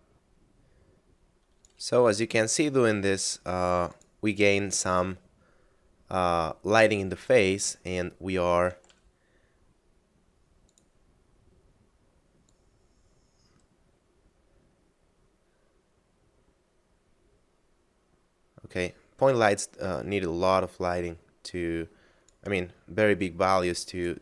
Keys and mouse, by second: 0.1 click, 2.4 g, 4.0 click, 7.8 shift+middle click, 8.9 g, 10.7 click, 23.2 click.